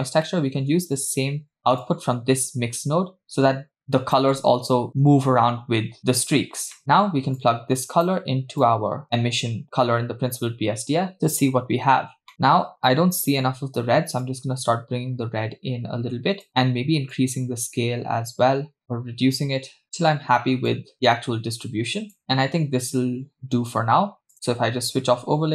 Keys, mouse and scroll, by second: 0.3 middle click, 0.9-1.8 scroll up 2, 1.8-4.2 drag, 6.8 middle click, 7.4 click, 8.6-9.6 drag, 12.3 middle click, 14.3-16.5 drag, 17.2-20.1 drag, 20.7 click, 22.2-23.9 scroll down 2, 24.3 click, 25.3 space.